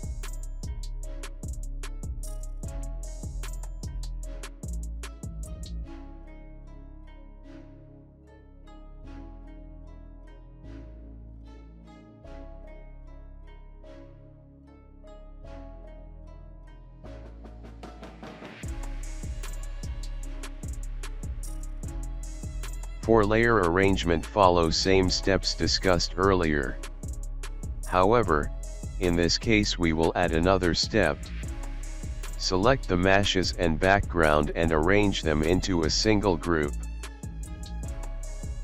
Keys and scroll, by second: 6.9 alt+space, 10.9 alt+space, 17.9 alt+space, 21.8 space, 23.9 ctrl+z, 26.9 alt+space.